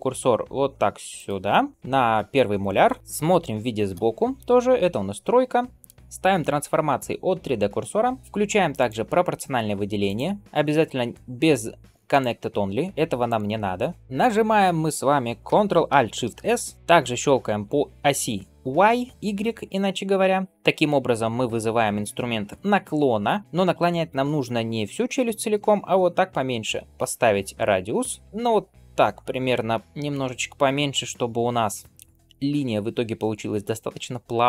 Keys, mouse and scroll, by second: 1.0 shift+right click, 3.8 KP_3, 8.6 click, 9.9-14.0 drag, 16.2 ctrl+alt+shift+s.